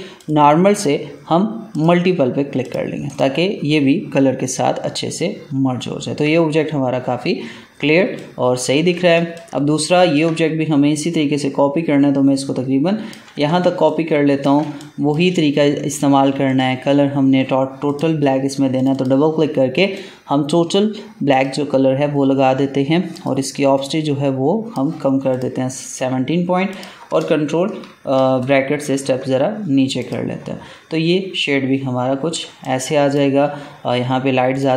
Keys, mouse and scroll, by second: 5.5 alt+scroll down 1, 7.4-7.7 alt+scroll down 1, 7.9 space, 8.1 click, 8.5 space, 9.1 ctrl+space, 9.3 ctrl+click, 9.7 ctrl+space, 10.0 ctrl+space, 10.9-13.5 drag, 13.5 ctrl+space, 13.8 ctrl+click, 14.1 ctrl+space, 14.7 click, 15.1 space, 16.4-25.3 drag, 28.3 ctrl+[, 29.9 click, 30.9 alt+scroll down 1, 32.3 space, 32.5 click, 32.9 space, 34.5 click.